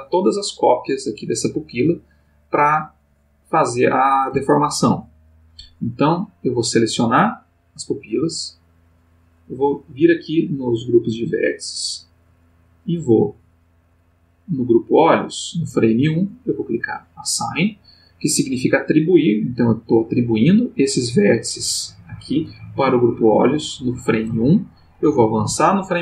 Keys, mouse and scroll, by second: 6.2-7.3 drag, 9.5 middle click, 10.2 middle click, 11.5 middle click, 12.7 click, 16.7 click, 25.5 Right.